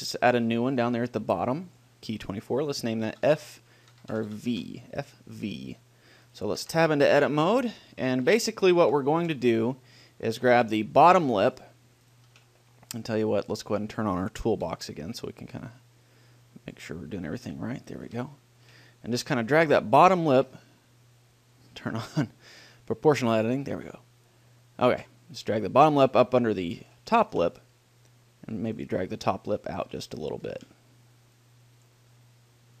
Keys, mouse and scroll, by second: 6.6 right click, 6.9 Tab, 7.5-10.4 middle drag, 7.6 click, 7.8 right click, 10.6 middle click, 11.0-13.8 right drag, 13.8 middle click, 14.0-15.6 drag, 14.8 t, 15.8-17.5 drag, 17.9-20.2 middle drag, 19.6 g, 20.9 click, 21.4 middle click, 22.3-24.0 drag, 24.0 g, 26.2 click, 27.0 middle click, 27.8 g, 28.0-29.2 right drag, 29.2 middle click, 29.2 click, 29.4 middle click, 30.0 click, 30.2 middle click, 30.4 middle click, 30.8 middle click, 31.6 click, 32.2-32.8 middle drag.